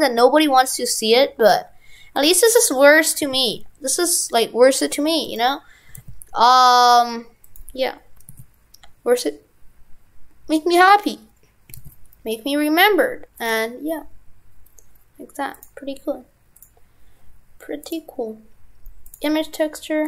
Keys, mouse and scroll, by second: 15.5 click.